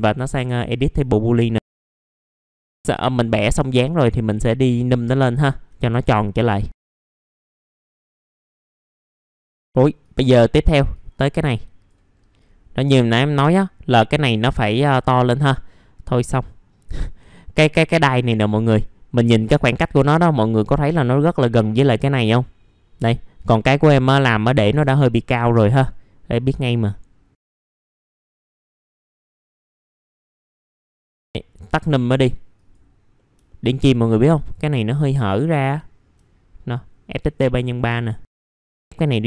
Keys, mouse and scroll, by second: 0.1 middle click, 0.4 F4, 1.0 alt+middle click, 1.7 click, 2.4 middle click, 2.7 F4, 2.7 click, 4.0 scroll down 1, 4.2 alt+middle click, 5.2 alt+middle click, 6.3 click, 6.7 F4, 7.0 alt+middle click, 7.2 scroll down 1, 7.3 middle click, 7.5 alt+middle click, 8.1 scroll down 1, 8.3 middle click, 8.5 click, 9.0 middle click, 9.3 scroll down 1, 9.5 middle click, 10.0 click, 12.1-12.8 scroll up 1, 12.8 middle click, 14.3-14.8 scroll down 1, 14.9 alt+middle click, 18.3 scroll up 1, 23.4 click, 23.8 middle click, 25.0 middle click, 25.1-25.5 scroll down 1, 25.5-26.3 scroll up 1, 26.3-27.9 drag, 27.9 alt+middle click, 28.3 alt+middle click, 28.5 F4, 28.7 alt+middle click, 29.2 click, 29.7 alt+middle click, 30.2 alt+middle click, 30.8 click, 31.0 alt+middle click, 31.6 click, 33.1 middle click, 33.5 alt+middle click, 34.3 click, 34.8 alt+middle click, 35.7 alt+middle click, 37.0 click, 37.6 scroll down 1, 38.0 alt+middle click, 38.3 click, 38.5 scroll up 1, 38.6 alt+middle click, 39.0-39.2 drag.